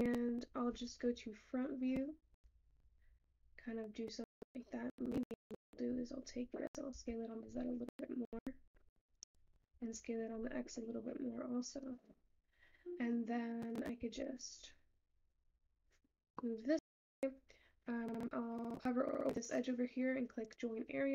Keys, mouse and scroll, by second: 0.0-11.3 middle drag, 11.3 s, 16.1-17.7 shift+middle drag.